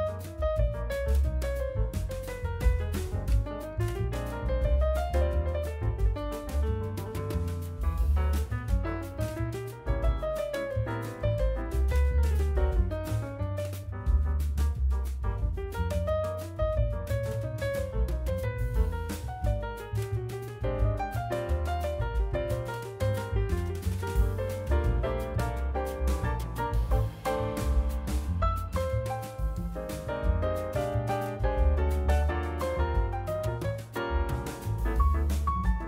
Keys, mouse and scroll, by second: 0.0 click, 1.6 n, 2.2 click, 3.3 d, 5.1-5.8 drag, 18.4 drag, 19.5 click, 20.3 click, 21.1 click, 22.5 click, 24.2 Tab, 24.3 click, 24.9 l, 25.5 Tab, 26.1 click, 26.6 Delete, 27.0-27.6 middle drag, 27.6 click, 28.1 KP_1, 28.9 g, 31.6 click, 32.7 click, 33.3-35.4 drag.